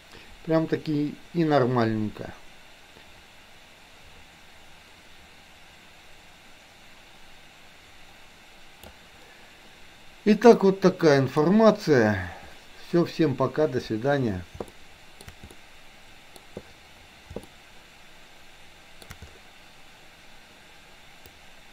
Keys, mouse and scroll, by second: 3.0-9.0 drag, 10.6 middle click, 14.7-15.2 shift+middle drag, 15.5-16.4 middle drag, 17.5-19.0 shift+middle drag, 21.2 click.